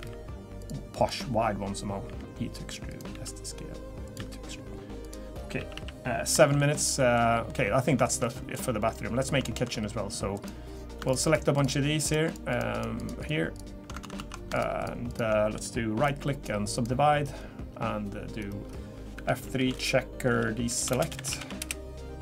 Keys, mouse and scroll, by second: 0.0 e, 1.0 click, 2.0 e, 3.1 s, 4.2 e, 5.3 scroll down 2, 5.6 a, 5.7 a, 6.3-7.5 scroll down 4, 6.4 shift+middle click, 7.0 middle click, 8.0 shift+middle click, 8.3 middle click, 9.4 shift+middle click, 9.7 scroll up 3, 10.3 click, 11.0 shift+click, 11.2 shift+click, 11.9 click, 13.3 click, 14.0 ctrl+z, 14.2 ctrl+z, 14.5 shift+click, 14.8 shift+click, 16.0 right click, 19.1 F3, 20.9 BackSpace.